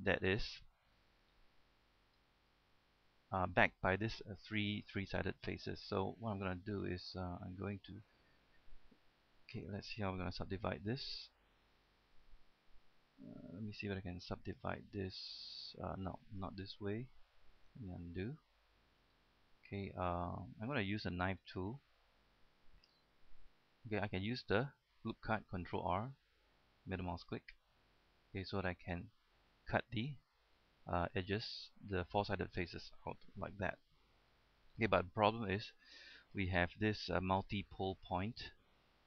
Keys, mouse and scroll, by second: 8.2 right click, 9.1 middle click, 9.7-10.1 scroll up 1, 12.0 right click, 13.1 w, 14.6 click, 18.1 ctrl+z, 18.8 shift+middle click, 21.0-23.6 shift+middle drag, 24.5 ctrl+r, 24.5 scroll up 1, 25.0-25.7 scroll down 1, 25.7-28.0 scroll up 1, 28.0-29.4 middle drag, 29.5-32.8 middle drag, 32.8-33.7 scroll down 1, 33.8 shift+middle click, 34.8 scroll up 1, 35.1 shift+middle click, 36.6 shift+middle click, 37.5 scroll up 1, 37.7-38.6 scroll down 1, 38.6-39.0 middle drag.